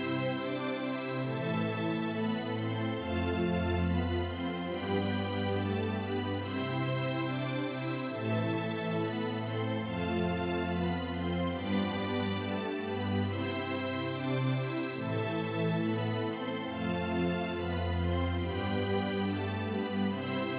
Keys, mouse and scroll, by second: 8.0-11.0 drag, 14.5-17.8 drag.